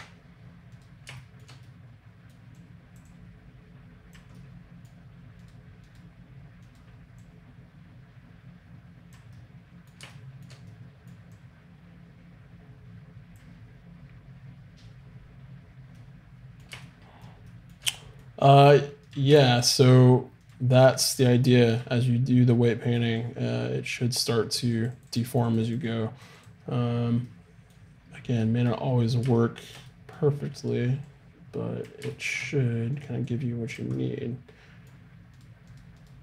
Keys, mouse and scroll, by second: 0.7-2.9 right drag, 2.6 click, 2.9 middle click, 3.3 click, 3.8-4.8 drag, 4.4 middle click, 4.6 middle click, 4.8 middle click, 5.4-8.3 right drag, 7.2-9.2 drag, 9.3 middle click, 11.3-13.0 drag, 16.0 middle click, 19.1-20.9 drag, 22.7-24.4 right drag, 23.2-28.2 drag, 27.2 middle click, 27.6 right click, 30.6-32.3 right drag, 31.1-32.7 drag, 31.1 middle click, 32.1-33.5 middle drag, 32.9 right click, 33.3 click.